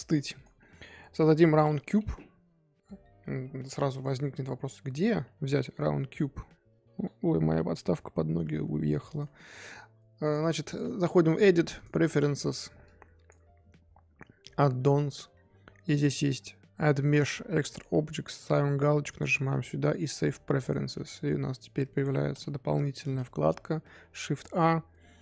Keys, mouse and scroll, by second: 10.2-13.3 drag, 21.9 click, 22.8 shift+a.